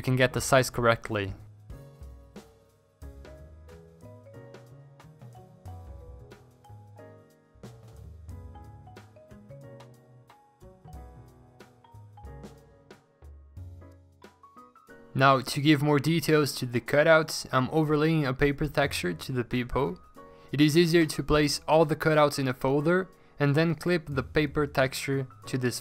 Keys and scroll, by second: 2.7 ctrl+z, 3.2 ctrl+z, 6.0 4, 6.3 0, 7.1 ctrl+z, 9.7 ctrl+z, 9.9 ctrl+z, 10.5 ctrl+z, 11.3 Delete, 15.5 alt+Tab, 16.7 ctrl+s, 16.9 Escape, 17.1 ctrl+alt+g, 18.0 ctrl+t, 18.6 v, 18.8 v, 20.2 ctrl+a, 20.6 ctrl+d, 23.3 3, 23.7 5, 24.3 s, 24.8 v.